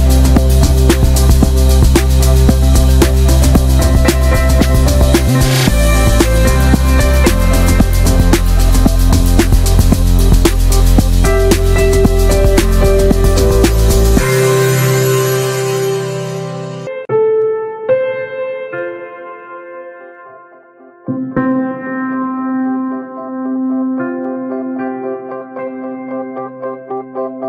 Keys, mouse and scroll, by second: 3.3-4.6 middle drag, 4.6 ctrl+z, 4.8 middle drag, 5.1-5.5 scroll down 1, 5.5-6.8 drag, 6.8 scroll down 2, 6.9 middle click, 7.1 scroll up 1, 7.6 right click, 7.8 drag, 7.9-8.6 scroll down 3, 8.1-8.4 middle drag, 8.6-9.1 middle drag, 9.1 ctrl+s, 9.2 middle drag, 9.4 scroll up 1, 9.5-10.2 shift+middle drag, 10.2 ctrl+s, 10.4-11.3 ctrl+middle drag, 11.3 ctrl+s, 11.5-12.0 middle drag, 12.0 ctrl+s, 12.2 shift+middle click, 12.3-13.2 scroll up 4, 12.4 click, 12.5 Tab, 12.7 middle click, 13.2-13.6 shift+middle drag, 13.6 3, 14.1 click, 15.0 2, 15.1 click, 15.9 scroll up 1, 16.1 shift+middle click, 17.0 3, 17.1 click, 17.5 ctrl+z, 17.8 click, 18.4 2, 18.7 alt+shift+click, 19.4 scroll up 1, 19.6-20.1 shift+middle drag, 20.1 ctrl+b, 21.4 middle click, 21.9 e, 22.7 shift+middle click, 22.9-23.7 scroll up 1, 23.7 ctrl+z, 24.7 shift+click, 25.0 middle click, 25.3 e, 26.2 shift+middle click, 27.0 drag, 27.2-27.4 shift+middle drag.